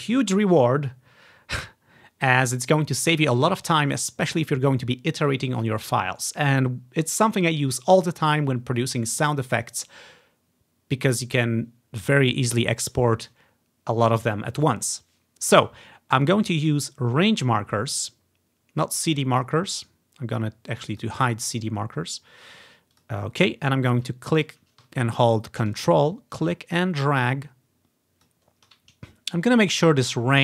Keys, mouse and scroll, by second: 12.7-14.4 drag, 19.9-21.1 right drag, 21.1 click, 23.1-24.9 drag, 26.2-28.4 ctrl+drag, 29.5 click.